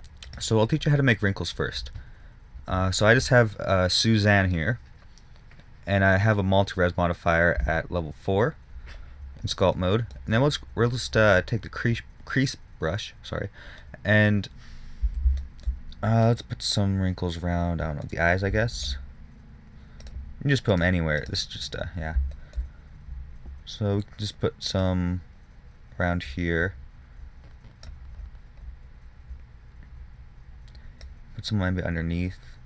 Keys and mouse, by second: 1.8 middle click, 2.0 middle click, 2.2-10.1 middle drag, 14.4-16.6 middle drag, 16.7 middle click, 20.3-25.2 drag, 31.3-32.6 drag.